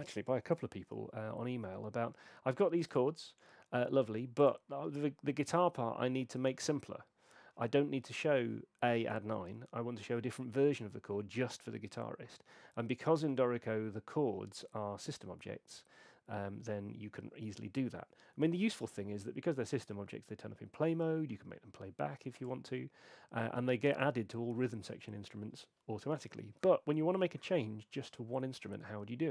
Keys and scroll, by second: 18.7 super+4.